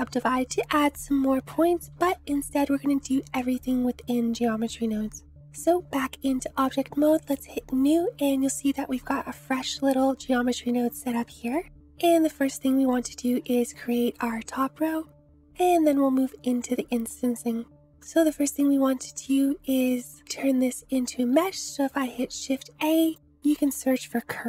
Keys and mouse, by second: 1.9 ctrl+z, 5.5 Tab, 7.3 click, 10.6 click, 14.2 click, 18.1 click, 21.5 shift+a.